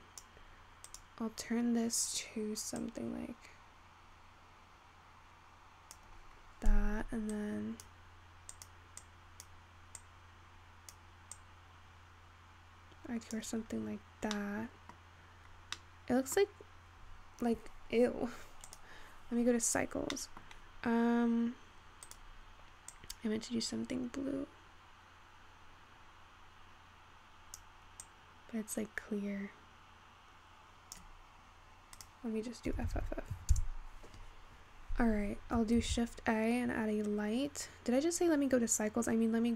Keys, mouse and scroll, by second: 1.0 click, 6.5-7.8 scroll down 4, 7.8-8.9 drag, 9.7-13.7 drag, 13.7-14.1 scroll up 2, 15.2-16.5 scroll down 2, 16.5-18.5 middle drag, 18.5-19.2 scroll up 1, 19.2 click, 22.2 click, 33.5 f, 35.2-37.2 scroll down 5, 37.2 shift+a.